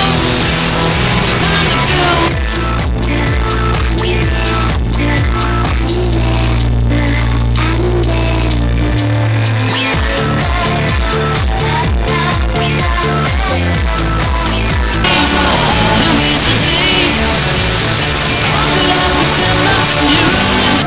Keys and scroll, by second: 2.4 Page_Down, 20.8 alt+s.